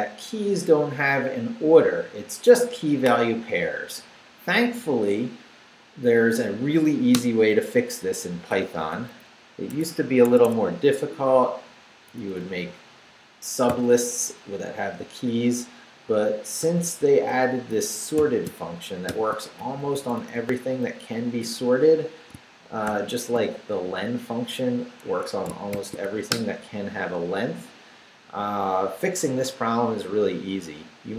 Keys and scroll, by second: 7.1 Return, 8.4 Up, 8.9 Down, 9.7 `, 10.2 Escape, 10.8 Right, 12.2 Right, 13.7 i, 16.1-19.1 typing, 19.6 shift+Right, 22.3 shift+Right, 22.9 shift+0, 25.1 Escape, 25.7 shift+;, 26.1 shift+w, 26.3 Return.